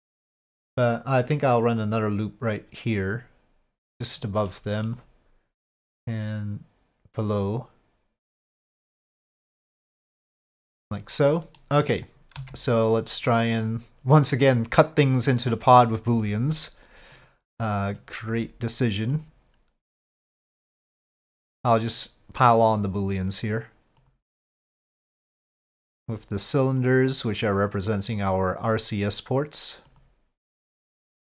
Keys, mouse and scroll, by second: 1.7 click, 3.0-4.1 drag, 4.5 middle click, 11.6 middle click, 12.4 Tab, 14.4-15.8 drag, 17.1-19.2 drag, 21.9-22.8 drag, 24.1-25.2 drag, 26.0 click, 26.8-28.3 drag, 29.9-31.1 drag.